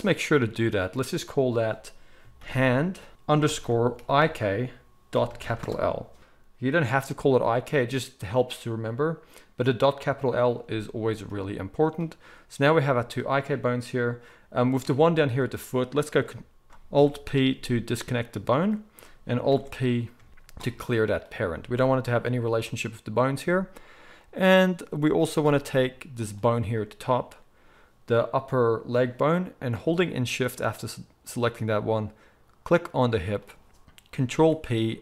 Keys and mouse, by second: 1.4-11.9 drag, 3.1 BackSpace, 11.9-24.2 middle drag, 16.6 ctrl+alt+z, 16.9 alt+p, 20.3 alt+p, 21.8 g, 24.2-26.2 drag, 26.2-33.1 middle drag, 33.1 shift+click, 33.5-35.0 middle drag, 34.3 ctrl+p.